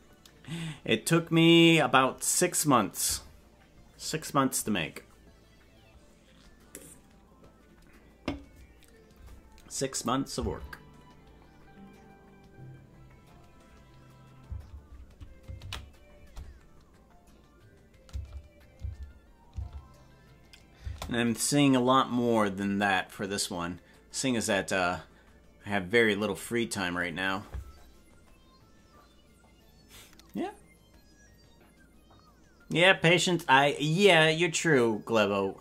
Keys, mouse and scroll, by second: 10.0 click, 10.7 space, 14.6 space, 19.0 ctrl+s, 19.1 space, 19.5 space, 20.9 space.